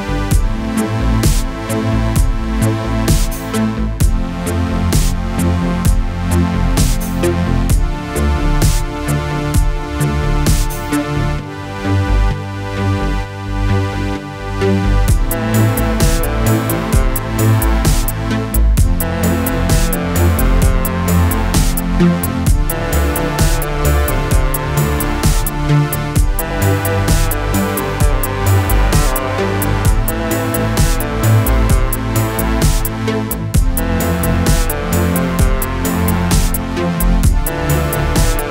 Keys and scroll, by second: 2.4 ctrl+z, 14.9 shift+Up, 15.9 Down, 28.6 Up, 29.7 Right, 32.6 alt+space, 38.4 alt+space.